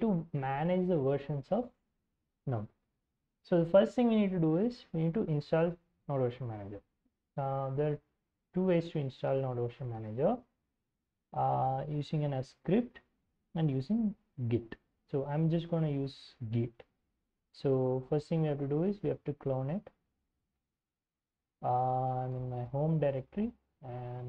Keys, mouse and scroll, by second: 4.9 alt+Tab, 5.9 ctrl+shift+Tab, 7.6-8.6 scroll up 2, 8.6 shift+space, 9.2 shift+space, 9.9 shift+space, 19.0 click, 20.5 ctrl+c, 20.8 alt+Tab, 21.4-22.5 typing, 23.4 ctrl+shift+v.